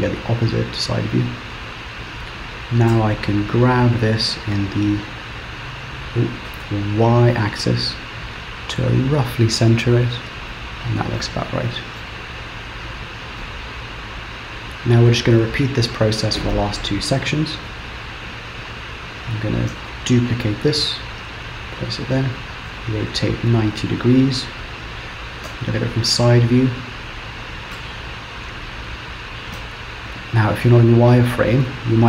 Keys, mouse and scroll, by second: 1.0-2.0 scroll up 1, 3.0 g, 11.3 middle click, 12.4-13.5 scroll down 6, 13.5 middle click, 17.6 KP_7, 18.3-19.8 scroll up 2, 19.9 shift+d, 22.8 r, 25.6 KP_3, 26.2 scroll up 2, 27.8 Tab, 28.3 click, 29.6 z, 31.6 middle click.